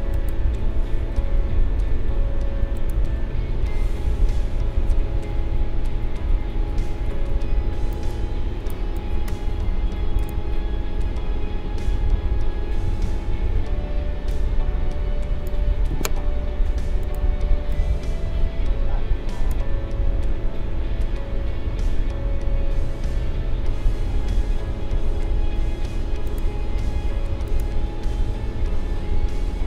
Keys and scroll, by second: 6.0 ctrl+=, 15.9 ctrl+z.